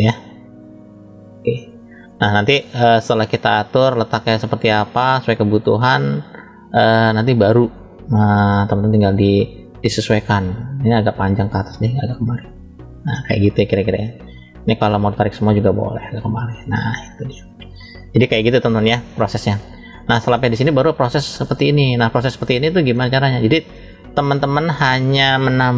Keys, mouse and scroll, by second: 0.9 click, 3.1 click, 3.4 click, 9.8 click, 10.5 click, 11.8 click, 14.3 click, 15.7 click, 19.4 scroll down 1, 20.1 scroll down 1, 20.2 shift+middle click, 22.8 middle click.